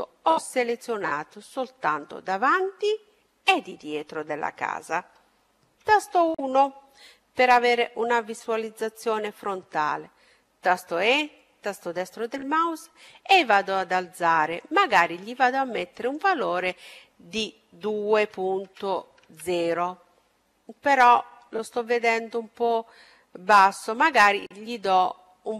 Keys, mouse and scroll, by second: 0.5-2.4 middle drag, 5.1 KP_1, 9.6 e, 11.5-13.5 drag, 15.0-16.9 drag, 23.0-24.8 drag.